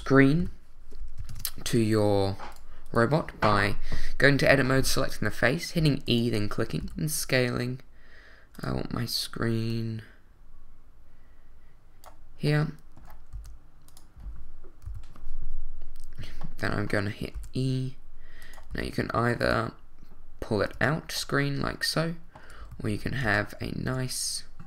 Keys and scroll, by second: 0.4 |, 1.3 ctrl+Tab, 5.8 e, 7.8 s, 13.3 s, 14.8 l, 17.3 e, 18.7 s, 20.7 Tab, 22.7 super+z, 23.2 super+Tab, 23.8 w.